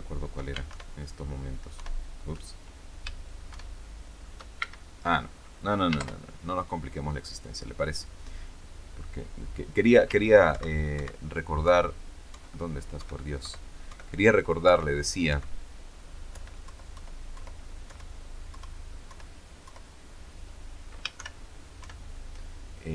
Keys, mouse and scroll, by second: 1.7 alt+F12, 3.4 shift+F12, 4.5 shift+Escape, 5.9 ctrl+Left, 10.4 ctrl+Right, 11.5 ctrl+Right, 12.2 ctrl+Right, 12.9 ctrl+Right, 14.5 ctrl+Right, 15.2 ctrl+Right, 16.2 ctrl+Left, 18.5 ctrl+Left, 21.1 ctrl+shift+F12.